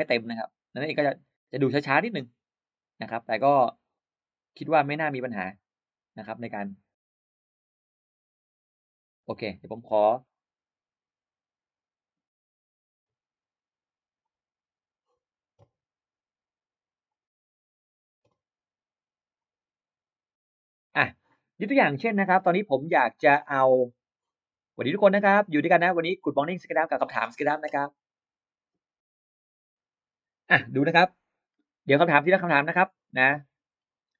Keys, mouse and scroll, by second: 9.7 right click, 14.1 click, 16.9 click, 19.2-20.6 drag, 22.8 click, 23.8 click, 24.6 click, 25.5-25.8 scroll up 1, 26.3-27.3 scroll down 3, 30.7-31.0 scroll up 1, 31.8 scroll down 1, 33.5 scroll down 1, 33.9 click.